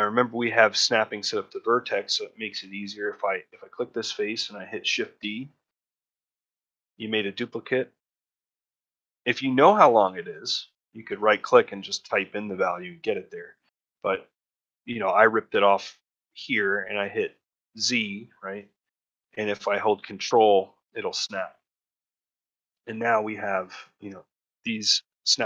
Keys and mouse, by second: 2.7 shift+middle click, 4.0 shift+middle click, 5.6 shift+d, 21.6 middle click, 22.0 shift+middle click, 22.4 middle click, 23.7 middle click, 24.4-25.4 middle drag.